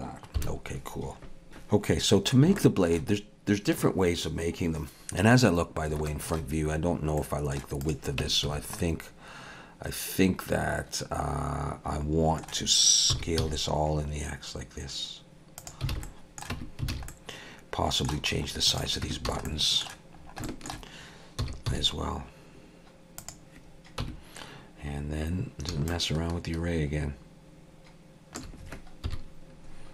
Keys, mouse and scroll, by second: 0.4 KP_7, 2.6 shift+middle click, 5.7 scroll down 1, 6.1 shift+middle click, 7.2 middle click, 7.8 click, 8.2 Tab, 8.5 a, 8.8 middle click, 13.1 s, 15.9 alt+a, 16.0 middle click, 16.5 Tab, 16.9 alt+a, 17.1 middle click, 18.3-19.0 scroll up 2, 18.7 click, 19.0 Tab, 19.3 a, 19.5 middle click, 20.2 scroll up 2, 20.4 shift+middle click, 21.5 s, 24.0 Tab, 25.9 shift+click, 29.1 KP_1.